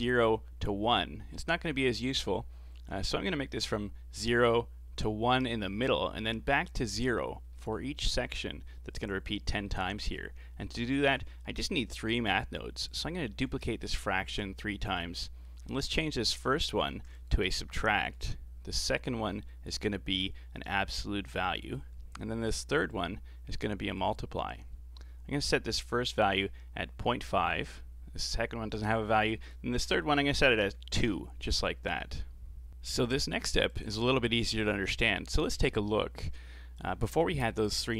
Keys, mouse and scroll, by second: 7.6 middle click, 8.0-11.0 scroll down 4, 11.0 click, 12.2 shift+d, 13.3 shift+d, 14.3 shift+d, 15.2-15.7 middle drag, 15.7-17.2 scroll up 8, 17.2-25.9 drag, 29.4-32.5 drag, 33.7 ctrl+shift+click, 34.3-34.7 scroll up 4, 34.7 middle click, 35.4 scroll down 3, 35.7-36.8 middle drag, 36.8 ctrl+shift+click, 37.8-37.9 scroll up 2.